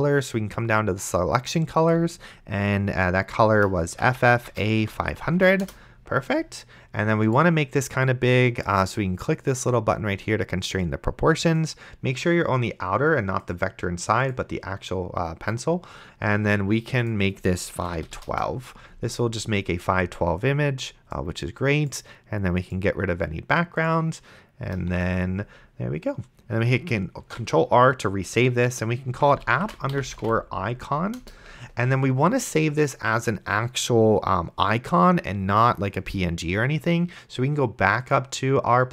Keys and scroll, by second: 4.0-5.6 typing, 5.6 Return, 18.0 KP_1, 18.2 KP_2, 18.3 Return, 25.2 shift+2, 27.5 ctrl+r, 28.8-31.0 typing, 31.2 Return.